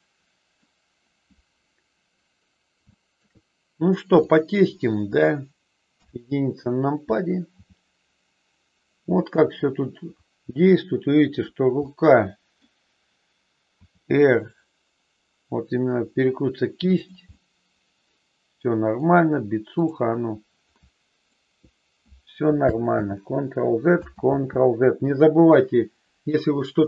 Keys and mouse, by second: 2.9 shift+middle click, 4.2-5.5 drag, 5.9 KP_1, 7.6 g, 11.9 middle click, 13.7 r, 16.9 click, 17.3-19.0 middle drag, 20.6 middle click, 23.0 ctrl+z, 24.2 ctrl+z.